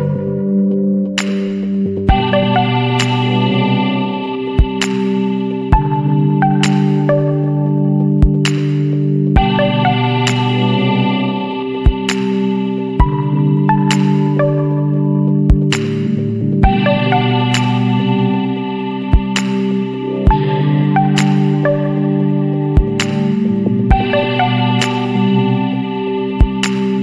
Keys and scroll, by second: 2.4 ctrl+alt+z, 4.0 ], 4.1 ], 6.5 space, 12.7 space, 14.0 space, 15.5 ctrl+d.